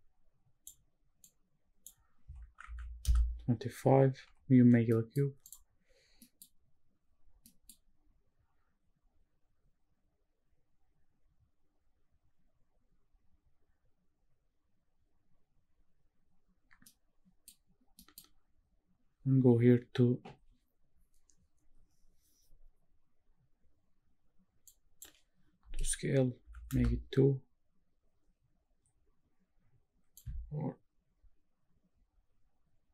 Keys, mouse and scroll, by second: 1.2-3.0 drag, 4.2 n, 4.9 middle drag, 5.5 click, 6.8 scroll down 1, 8.4 middle click, 8.4-10.7 scroll down 1, 10.7 middle click, 10.7-14.5 scroll down 1, 14.5-15.2 scroll down 1, 15.2-16.8 scroll down 1, 16.8 middle click, 18.0 middle click, 19.0-23.0 scroll up 1, 23.6-24.5 scroll up 5, 24.7-26.8 drag, 28.6 scroll up 1, 28.9 scroll down 1, 30.2-32.9 shift+drag.